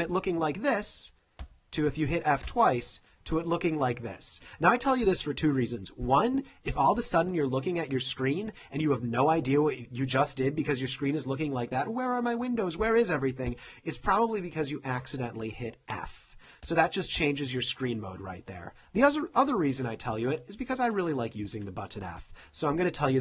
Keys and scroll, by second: 0.3 f, 1.5 f, 13.7 f, 16.8 f, 20.1 space.